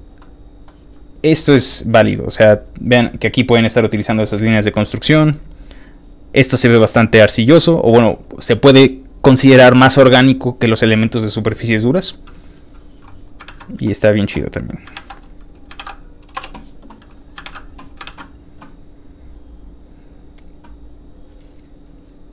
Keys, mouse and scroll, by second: 0.2 middle click, 1.1-2.1 scroll down 6, 3.1-4.8 scroll up 2, 4.8 middle click, 12.2 middle click, 12.2 middle click, 12.2 scroll up 1, 13.4 ctrl+w, 14.7 click, 14.9 ctrl+c, 15.5 ctrl+click, 15.8 ctrl+v, 16.3 Return, 17.2 ctrl+click, 17.4 ctrl+w, 19.4-20.5 scroll down 6, 20.8 scroll down 1, 21.5-22.0 scroll down 2.